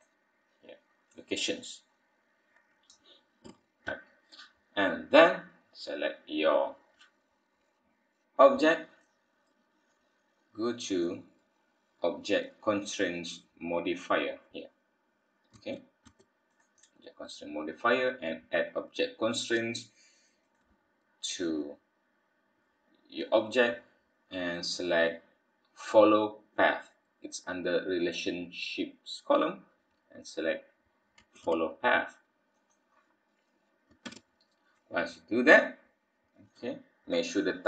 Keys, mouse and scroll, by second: 3.5 n, 4.1-4.7 scroll down 5, 6.4-7.6 scroll up 2, 7.6-8.8 scroll up 1, 8.8-10.9 scroll up 1, 10.9 click.